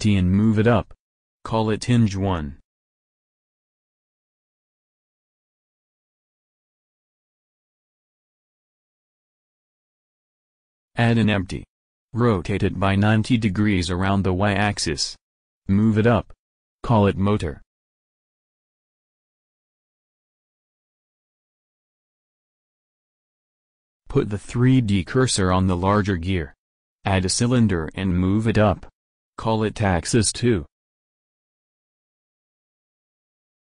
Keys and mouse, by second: 2.2 shift+a, 4.9 s, 5.7 g, 7.7-9.6 drag, 12.1 shift+a, 14.0 s, 15.4 r, 17.4 g, 19.7 click, 25.6 shift+s, 27.1 shift+a, 30.9 g, 32.7-33.6 drag.